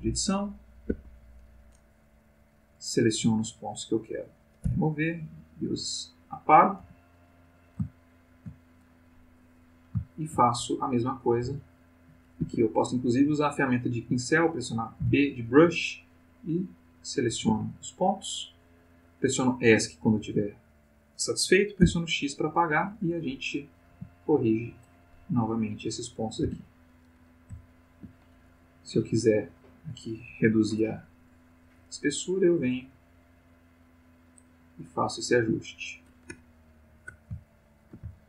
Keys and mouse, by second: 0.1-1.4 drag, 0.9 Escape, 2.3 click, 3.0-4.3 drag, 4.6 x, 5.0 click, 5.7 click, 6.7 g, 7.4 click, 8.0-8.5 shift+middle drag, 9.5 click, 10.0-10.4 shift+middle drag, 11.4 c, 12.4 Escape, 15.0 c, 15.6-17.5 drag, 17.5 Escape, 21.8 x, 22.1 click, 23.6 click, 23.9 g, 24.5 click, 25.6 click, 26.4 x, 26.6 click, 27.6-28.2 shift+middle drag, 28.4-29.2 shift+drag, 31.5 click, 32.2-34.5 drag, 34.8 click, 36.1 click, 37.5-38.2 ctrl+middle drag.